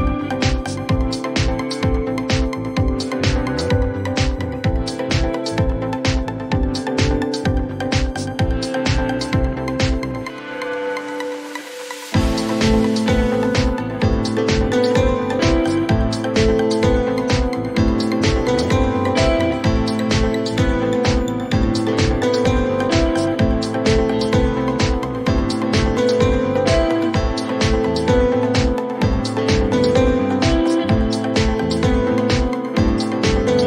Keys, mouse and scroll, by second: 0.6-1.0 typing, 2.7 click, 8.0 click, 12.5 click, 13.7 click.